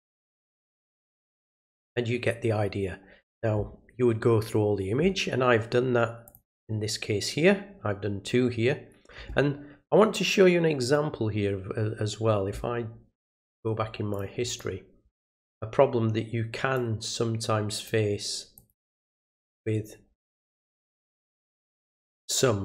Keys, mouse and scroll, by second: 0.3 click, 0.9 click, 1.8 click, 6.2 click, 14.1 click, 14.4 click, 16.7 click, 18.5 click.